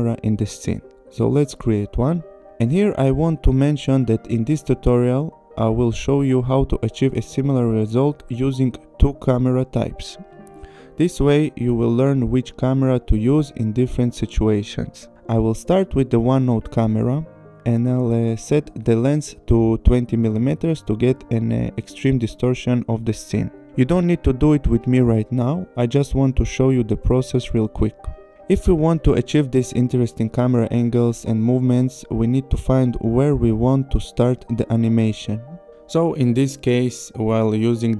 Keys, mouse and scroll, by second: 0.4 click, 2.9 click, 15.5 click, 17.6 click, 20.0 click, 21.3 click, 26.0-27.2 scroll, 27.4 p, 28.1 click, 29.8 click, 31.1 click, 33.5-34.1 scroll, 34.1 click.